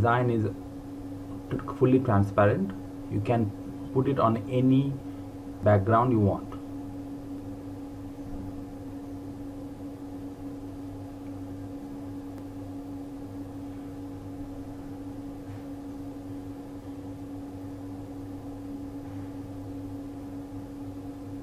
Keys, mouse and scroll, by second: 11.9 click, 15.3 ctrl+Num_Lock, 15.7 ctrl+g, 16.8 click.